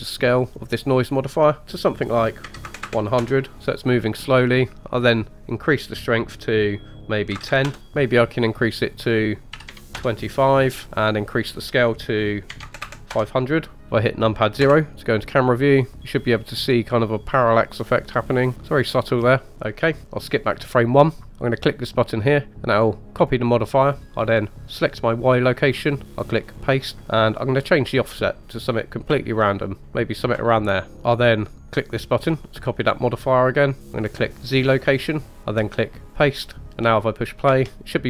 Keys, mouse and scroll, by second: 1.0-3.6 drag, 2.8 KP_0, 5.0-7.8 drag, 7.8-8.2 scroll down 2, 8.9-9.9 drag, 11.4-13.2 drag, 12.8 KP_0, 14.6 KP_0, 16.6-17.4 scroll up 2, 19.5 space, 19.9 click, 23.2 click, 24.9 click, 26.4 click, 26.6 typing, 27.5-29.8 drag, 30.9 click, 32.1 click, 34.5 click, 36.0 click, 37.5 space.